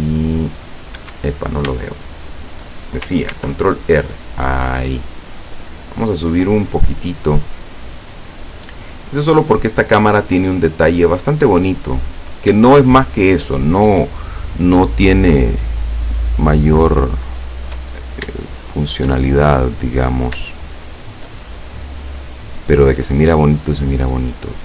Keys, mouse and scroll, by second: 1.0 Escape, 1.5 scroll down 2, 1.9-2.8 shift+middle drag, 3.4 ctrl+r, 4.1 click, 9.2 click, 9.7 scroll up 2, 10.2 shift+middle click, 10.2 shift+scroll up 2, 11.0 shift+middle click, 11.8 right click, 12.2 scroll up 1, 15.4 shift+right click, 16.0 shift+right click, 16.4 shift+right click, 17.0 shift+right click, 18.0 shift+scroll up 2, 18.5 shift+middle click, 19.1 shift+scroll up 2, 19.3 shift+middle click, 20.8 shift+right click, 22.1-22.5 scroll down 2, 23.0-24.6 middle drag.